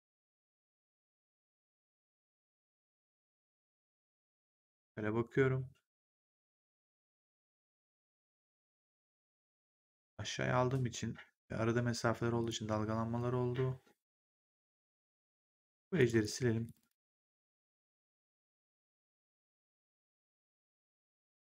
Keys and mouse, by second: 12.3 click, 13.1 1, 15.4 right click, 15.9 click, 16.6 shift+click.